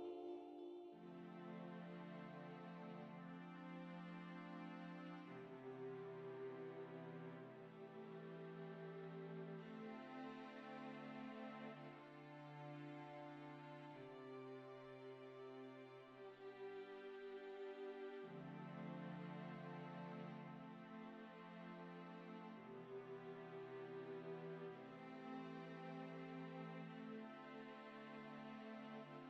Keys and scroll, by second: 17.4 ctrl+z.